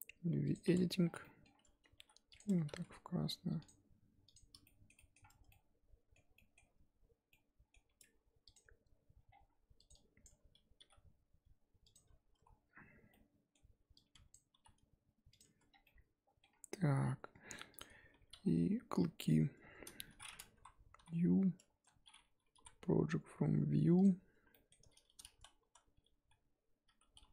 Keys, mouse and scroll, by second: 0.6 click, 1.9 g, 2.4 Tab, 2.7 z, 4.2 click, 4.6 shift+middle click, 5.2 scroll up 4, 5.5-6.6 middle drag, 6.6 Tab, 7.3-8.5 middle drag, 8.5 click, 10.2 click, 10.8 g, 12.3 a, 14.3 click, 14.5 g, 15.4 Tab, 15.7 scroll down 5, 15.8 middle click, 16.5-17.1 scroll up 2, 17.8 click, 18.1 Tab, 18.3 a, 20.5 KP_1, 21.8 a, 24.0 u, 25.6 a, 26.9 g.